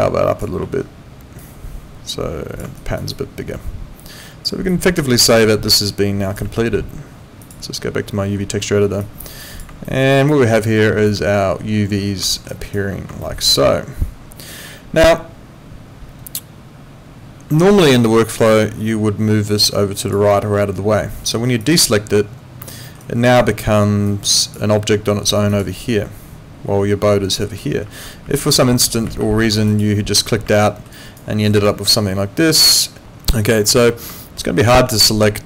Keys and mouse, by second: 0.6 ctrl+z, 1.4 click, 2.8 alt+right click, 3.1 alt+click, 4.7 alt+click, 5.0 alt+right click, 5.8 alt+click, 7.4 click, 9.0 click, 9.9 alt+middle click, 10.1 alt+right click, 10.5 alt+middle click, 10.8 alt+right click, 12.3 alt+middle click, 12.5 alt+right click, 13.2 alt+middle click, 17.6 alt+right click, 18.1 alt+middle click, 19.5 click, 21.6 click, 22.7 alt+middle click, 23.0 alt+right click, 25.5 click, 27.8 ctrl+z, 29.7 click, 30.5 alt+middle click, 30.9 alt+right click, 34.2 alt+middle click, 34.4 alt+right click.